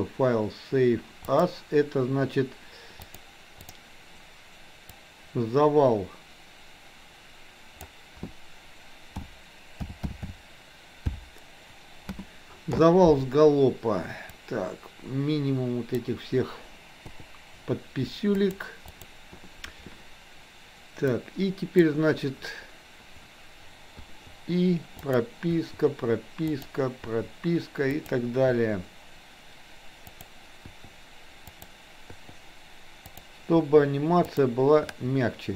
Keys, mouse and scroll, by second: 21.2 click, 25.1 click, 25.5 i, 26.6 click, 28.0 click, 30.1 click, 30.7 i, 31.6 click, 33.1 click, 33.5 i, 34.2 click.